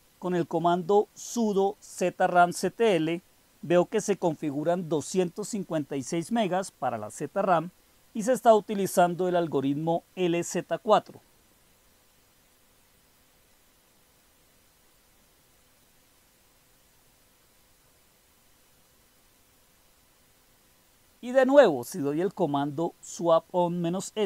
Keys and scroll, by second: 0.0-1.1 typing, 6.9-9.6 typing, 10.6-11.9 typing, 12.7 Up, 13.0 Up, 13.3 Up, 14.5-17.8 typing, 15.6 Up, 16.0 Up, 19.8-20.2 typing, 20.5-22.0 Up, 22.7 Up, 23.4 Up.